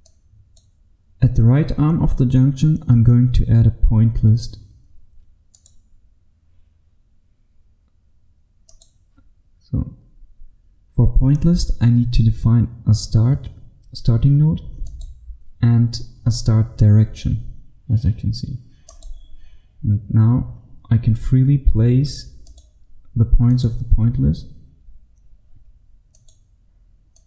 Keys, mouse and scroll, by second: 5.5 click, 5.7 right click, 8.8 click, 10.1-14.9 scroll up 1, 14.9 click, 20.3-22.6 scroll down 1, 22.6 click, 24.1 click.